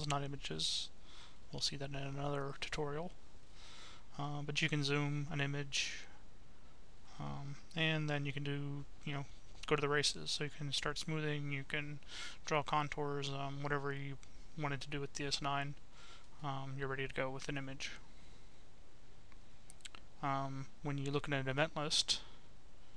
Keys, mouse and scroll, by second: 0.0 click, 1.5 middle click, 2.2-4.0 right drag, 5.1 click, 7.5 click, 9.9 click, 11.5 click, 12.6 click, 13.4-14.8 right drag, 19.4 click, 20.2 middle click, 22.5 click.